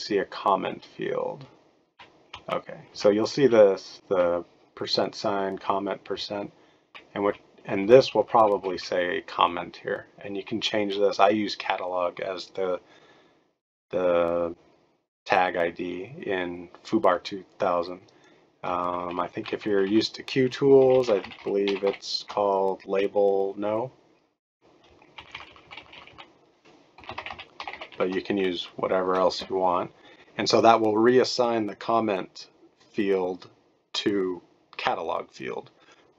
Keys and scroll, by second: 2.3 Left, 2.9 Right, 3.4 Right, 4.1 Right, 6.1-6.9 Left, 7.2 Left, 7.8 Left, 8.0 Left, 8.2 Left, 8.3 Left, 8.5 Left, 8.7 Left, 18.8 shift+Right, 19.0 shift+Right, 19.2 shift+Right, 19.3 shift+Right, 19.5 shift+Right, 19.6 shift+Right, 19.8 shift+Right, 20.5-22.3 typing, 23.7-24.4 typing, 25.1 shift+Left, 25.3 shift+Left, 25.5 shift+Left, 25.7 shift+Left, 25.9 shift+Left, 26.1 shift+Left, 26.7-28.4 typing.